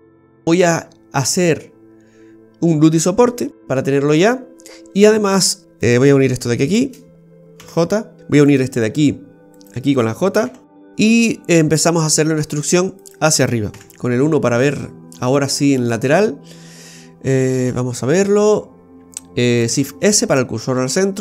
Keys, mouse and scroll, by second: 0.2-0.8 scroll up 7, 3.6 middle click, 5.8 right click, 6.7 shift+right click, 7.5 j, 8.5 right click, 9.5 shift+right click, 10.5 j, 10.9 middle click, 11.9 right click, 12.5 alt+shift+right click, 12.6 right click, 13.0 alt+shift+right click, 13.7 KP_1, 14.4-15.0 scroll down 8, 15.2 shift+middle click, 15.9-16.4 scroll down 5, 17.5-18.4 scroll up 3, 18.8-19.5 scroll up 1, 19.7 shift+s.